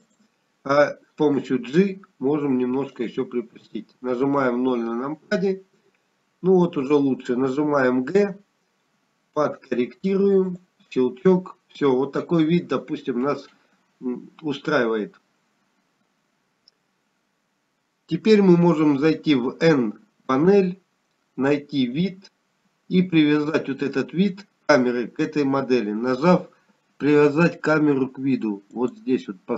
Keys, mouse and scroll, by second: 0.6 r, 4.4 g, 9.7 KP_0, 11.0 g, 23.2 n, 24.9 click.